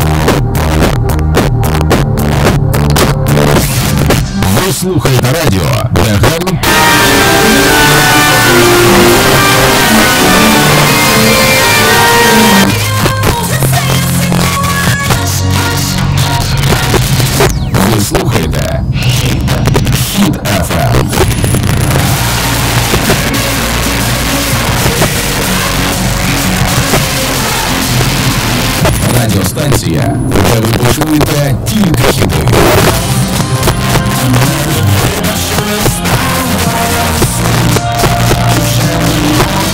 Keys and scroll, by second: 1.7 h, 1.7 Up, 2.3 Up, 2.8 Up, 3.0 Up, 3.0 Return, 12.6 Page_Down.